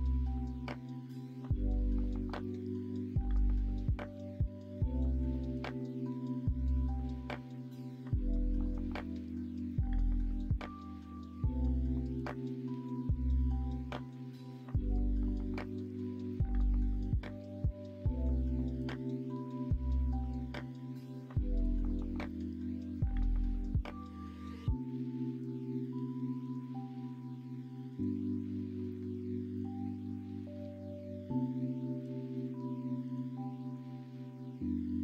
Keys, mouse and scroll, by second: 1.1 middle click, 10.2 middle click, 12.6 Tab, 13.2 Tab, 14.0 middle click, 14.9 middle click, 15.6 middle click, 16.0 middle click, 17.8 3, 20.3 l, 20.6 middle click, 21.6 s, 25.1 middle click, 27.1 o, 27.9 s, 34.0 middle click, 34.5 middle click.